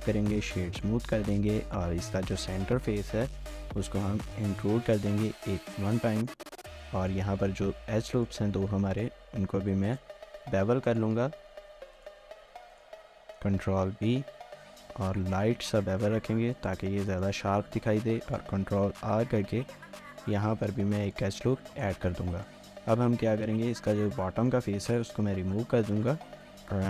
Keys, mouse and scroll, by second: 0.5 shift+middle click, 0.9 middle click, 0.9 Tab, 1.1-1.5 scroll up 1, 1.5 typing, 3.6 typing, 5.0 typing, 5.4 shift+middle click, 6.5 scroll up 1, 6.7 shift+middle click, 7.1 scroll up 1, 7.7 2, 8.2 alt+click, 8.5 z, 9.9 alt+shift+click, 10.5 ctrl+z, 10.9 alt+shift+click, 11.6 z, 12.7 alt+shift+click, 13.9 ctrl+b, 17.1 shift+middle click, 17.4 scroll up 1, 18.0 ctrl+r, 21.4 middle click, 22.0 Tab, 22.3 shift+middle click, 23.4 typing, 23.9 Tab, 24.2 middle click, 24.7 3.